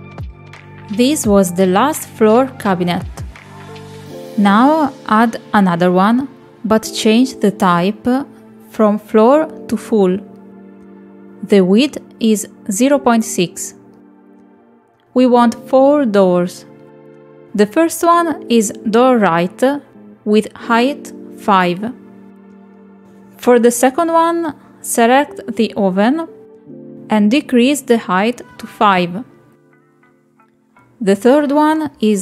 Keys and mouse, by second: 3.0 click, 4.5 middle click, 8.6-10.4 drag, 11.4 shift+middle click, 12.1 click, 13.5-14.8 drag, 17.9 click, 20.5-22.0 drag, 24.1 click, 28.1-30.3 drag.